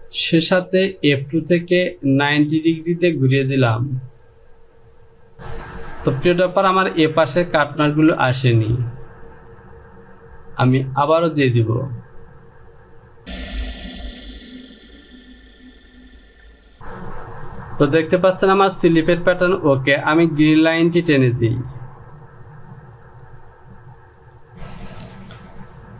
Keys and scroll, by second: 16.3 Home.